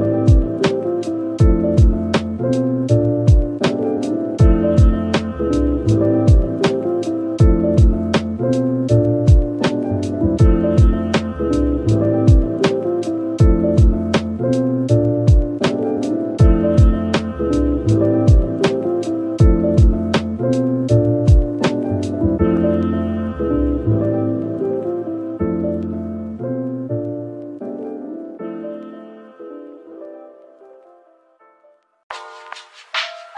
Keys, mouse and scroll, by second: 0.2-0.9 scroll down 1, 0.6-2.5 typing, 1.3-2.0 scroll down 1, 2.7 middle click, 7.2-7.9 typing, 8.9 double click, 9.2 scroll down 1, 9.4 middle click, 10.8-11.5 scroll up 1, 11.4-14.0 typing, 15.7 double click, 16.1 middle click, 18.1-19.0 typing, 19.3 double click, 19.7 scroll down 1, 20.1 middle click, 21.0-21.5 scroll down 1, 21.5 middle click, 25.1 a, 31.1-32.3 scroll down 1, 32.3 /.